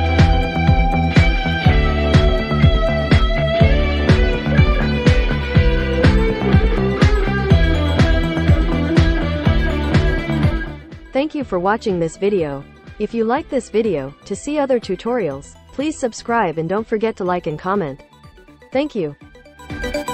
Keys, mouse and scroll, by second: 0.2 click, 7.1 click, 7.5-9.6 drag.